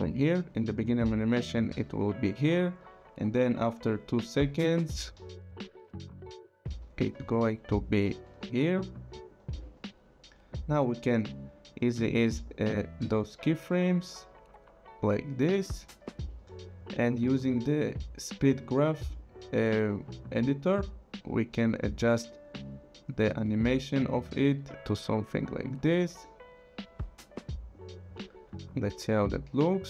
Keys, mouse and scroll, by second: 1.8 click, 3.3 click, 10.8 click, 12.4 right click, 15.6 click, 16.9 click, 17.7 right click, 19.1 click, 21.5 click, 22.8 click, 23.3 click, 24.7 click, 29.2 click, 29.5 space.